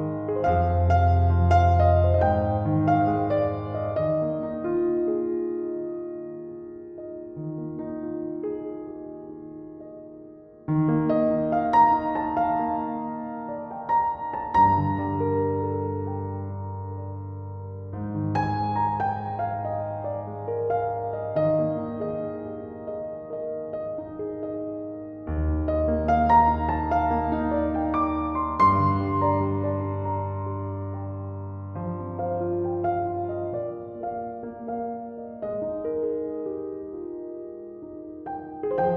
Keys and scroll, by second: 0.4 typing, 7.5-8.3 typing.